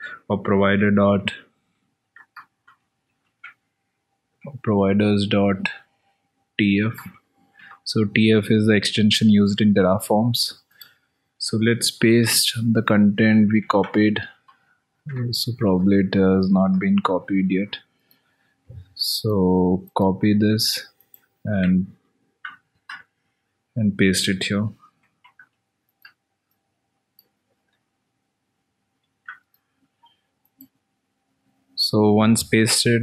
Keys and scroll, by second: 2.4 alt+Tab, 3.7 ctrl+c, 3.9 ctrl+v, 4.7 alt+Tab, 7.3 ctrl+c, 10.5 alt+Tab, 11.9 ctrl+a, 16.3 alt+Tab, 26.0 alt+Tab.